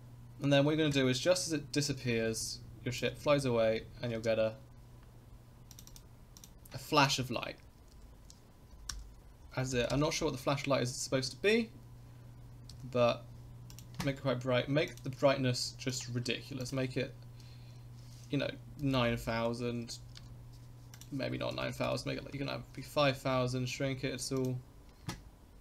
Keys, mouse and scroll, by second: 1.9-3.0 drag, 3.1 space, 4.2 space, 5.7-10.5 drag, 12.7 s, 14.9 click, 15.9 click, 16.6-22.9 drag, 19.1 0, 19.3 0, 21.8 0, 22.0 0, 23.1 s.